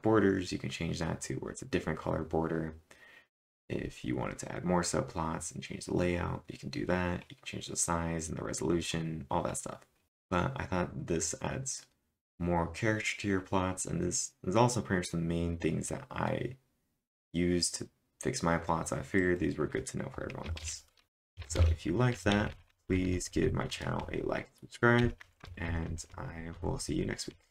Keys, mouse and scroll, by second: 6.1 click, 6.1 scroll up 3, 6.9-7.6 typing, 6.9 scroll down 3, 8.6 scroll up 4, 11.7-12.4 typing, 19.2 click, 19.2 scroll down 1, 19.2-24.0 typing, 20.6 ctrl+/, 27.3 typing.